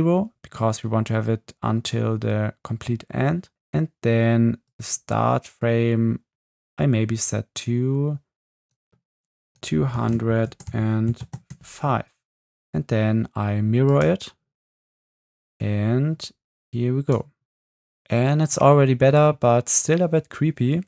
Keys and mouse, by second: 4.7 drag, 5.1 click, 5.3 click, 15.0 space, 15.5 space, 16.7 click.